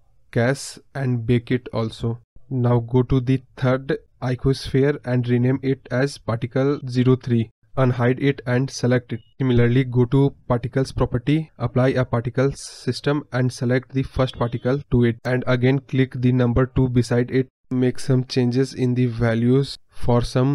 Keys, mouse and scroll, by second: 1.3 space, 1.9-9.1 drag, 13.8 click.